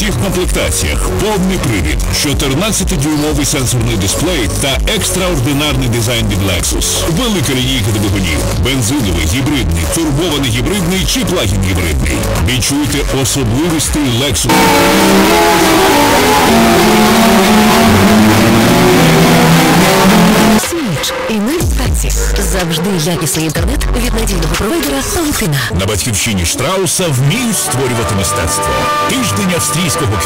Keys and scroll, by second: 2.1 h, 2.3-3.6 Down, 4.0 Down, 4.2 Return, 20.6 Page_Down.